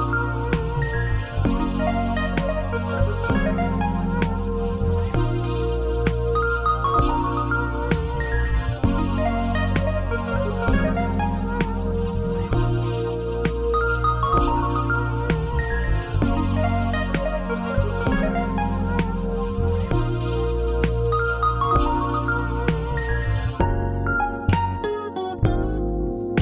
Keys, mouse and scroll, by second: 0.2-4.5 drag, 9.1 scroll down 2, 9.4-10.9 shift+middle drag, 9.7-10.9 scroll up 4, 12.6-13.0 scroll down 2, 13.0 shift+middle click, 13.3 scroll up 1, 13.8 scroll up 1, 14.0-26.4 shift+middle drag, 15.1-15.5 scroll down 1, 15.6 scroll up 1, 16.2-17.4 scroll up 1, 17.4 alt+a.